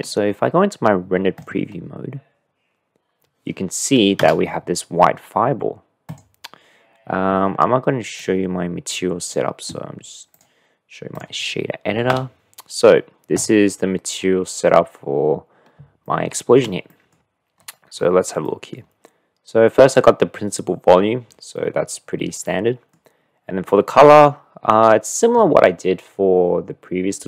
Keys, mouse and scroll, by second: 1.6 middle click, 4.2 KP_0, 6.0 click, 8.2-9.5 drag, 10.3-11.3 drag, 12.1 n, 16.0-16.6 shift+middle drag, 17.0 middle click, 18.6 click, 22.4 click, 23.7 click, 24.8-27.2 middle drag.